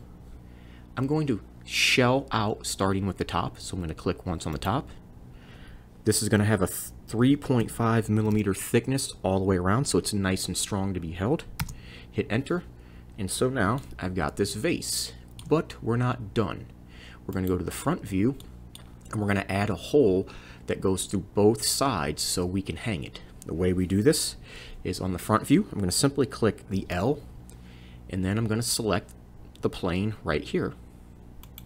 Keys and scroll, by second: 6.4 3, 7.6 5, 26.8 l.